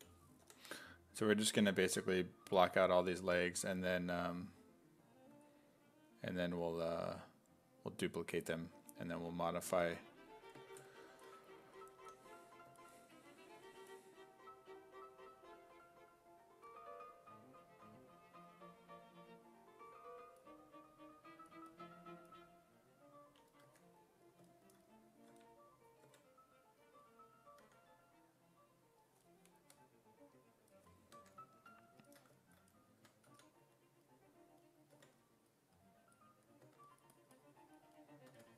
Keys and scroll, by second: 0.0 b, 5.3 s, 6.9 e, 12.0 f, 23.7 1, 27.7 e, 31.2 1, 33.0 2, 33.3 s, 35.0 5, 36.6 2, 38.3 2.